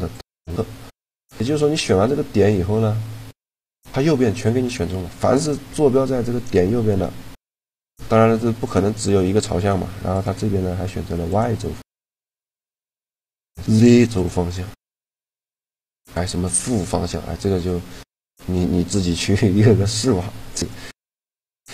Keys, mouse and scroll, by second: 0.8-3.6 middle drag, 7.9 middle click, 8.1-9.6 drag, 9.9-11.6 drag, 12.0-15.7 drag, 17.4-20.4 middle drag, 18.7 a, 20.4-21.7 right drag.